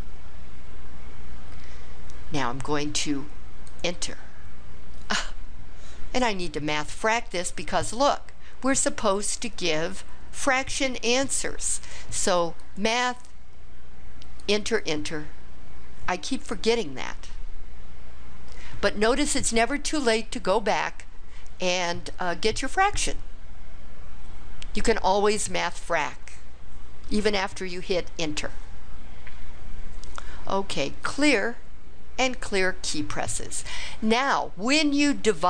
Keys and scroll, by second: 3.8 Return, 14.4 Return, 14.9 Return.